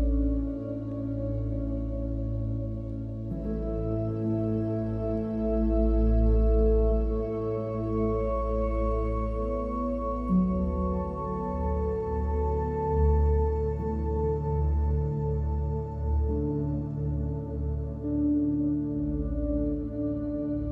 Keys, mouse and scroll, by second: 0.1 click, 0.3 click, 0.5 click, 3.0 middle click, 3.1 middle click, 3.7 middle click, 5.5 middle click, 6.1 middle drag, 6.4 shift+a, 7.9 click, 8.1 shift+a, 9.5 click, 10.2 click, 10.9 click, 11.3 click, 11.7 click, 12.2 click, 12.5-13.1 drag, 13.3 drag, 14.9 shift+a, 15.8-16.5 drag, 17.1-17.9 drag, 18.1 click, 18.6 x, 18.8 shift+a, 19.4 shift+a, 20.0 shift+a.